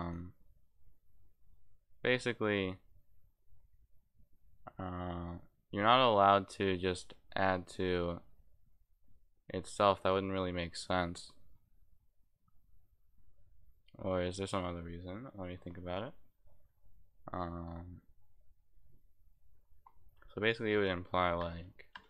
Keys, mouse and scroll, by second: 0.0 click, 20.5 click.